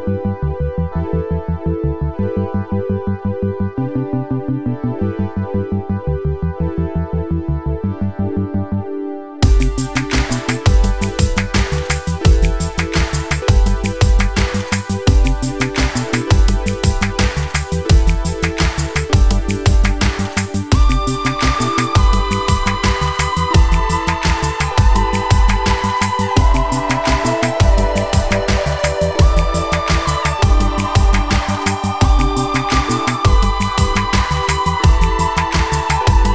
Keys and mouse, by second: 1.0 2, 1.8 click, 2.4 ctrl+r, 4.7-6.5 drag, 4.7-6.5 right drag, 7.3 g, 10.2-12.3 middle drag, 11.2 g, 12.5 middle click, 13.0 click, 13.4 shift+click, 14.3 click, 15.5 Tab, 16.3 shift+drag, 17.7-18.6 right drag, 19.2-19.5 shift+drag, 19.2-19.5 shift+right drag, 20.1 shift+click, 20.1 shift+right click, 20.9 Tab, 22.8 Tab, 23.6 alt+click, 25.0 alt+shift+click, 25.9 s, 29.4 s.